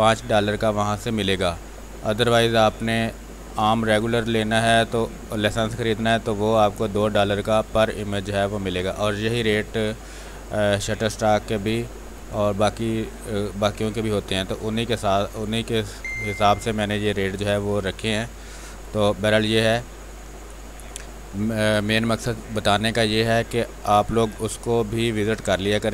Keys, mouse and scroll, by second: 0.2 click, 0.5 space, 1.3 x, 2.0 click, 4.2-5.9 typing, 4.7 click, 5.7-12.5 drag, 12.8 space, 13.1 click, 14.3 space, 14.5 click, 16.5 space, 18.2-20.2 drag.